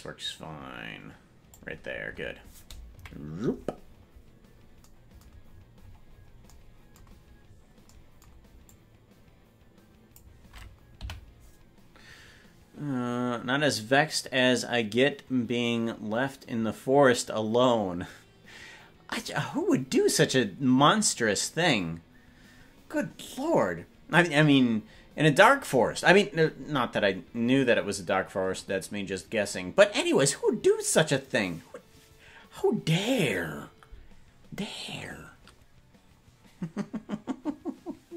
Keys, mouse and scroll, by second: 2.9 KP_Decimal, 3.8-4.8 scroll down 5, 4.8-5.4 scroll down 1, 5.4-6.6 scroll up 21, 7.5-8.8 scroll up 3, 8.8-10.3 drag, 11.1 Right.